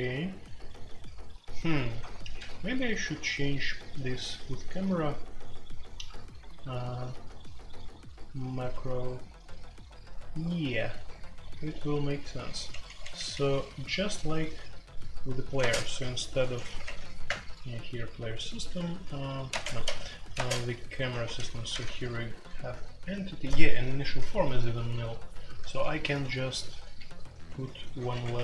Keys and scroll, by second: 2.0-2.3 typing, 3.7 typing, 6.2 typing, 12.5-13.1 typing, 15.5-17.7 typing, 19.4-20.3 typing, 21.1 ctrl+g, 21.2 ctrl+g, 21.4-28.4 typing.